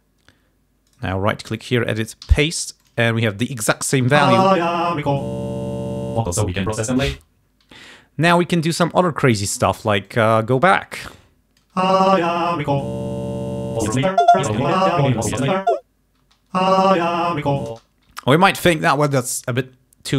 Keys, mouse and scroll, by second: 1.1 right click, 1.7 click, 2.3 ctrl+v, 2.9 ctrl+click, 4.3 space, 7.2 space, 8.4 click, 9.2-10.4 drag, 11.1 click, 11.9 space, 12.5 scroll up 2, 16.3 space, 17.8 space, 18.2 g.